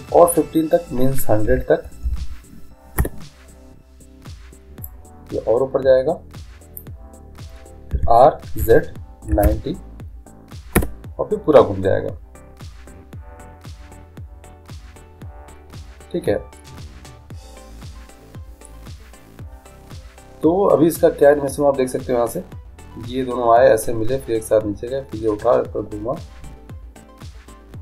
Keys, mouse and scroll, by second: 2.3 0, 4.9-6.9 drag, 8.0 r, 22.4-24.2 drag.